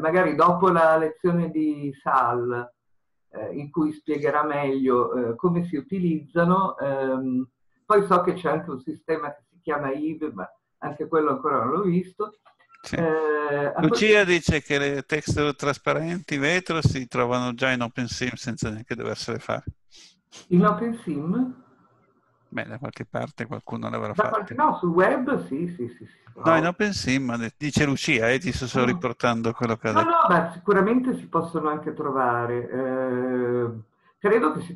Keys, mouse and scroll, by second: 0.1-20.6 scroll up 1, 20.6-34.7 scroll up 1.